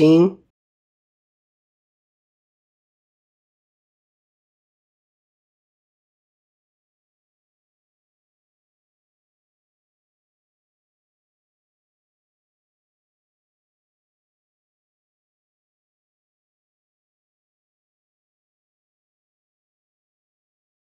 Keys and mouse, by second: 0.4 click, 1.2 click, 2.0-4.4 drag, 12.5 click, 17.2-19.2 drag.